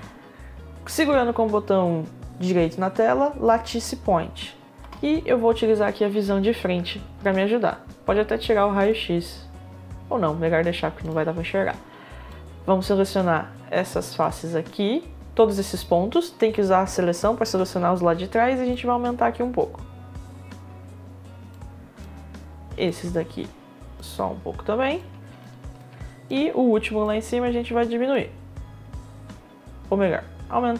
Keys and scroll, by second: 4.6 space.